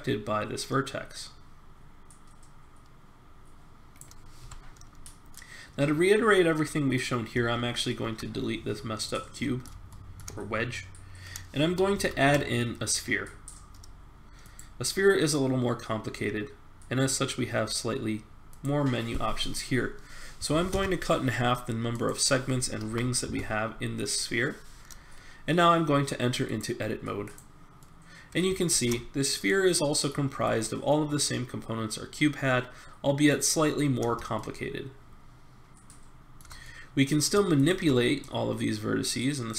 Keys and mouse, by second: 4.4 Tab, 5.3-7.2 middle drag, 7.3 x, 8.5-10.7 middle drag, 11.9 shift+a, 18.5-20.5 drag, 21.9-24.0 drag, 28.2 middle click, 28.7 ctrl+Tab, 30.4 click, 34.3-36.2 middle drag, 36.6 middle click, 37.5-38.6 drag.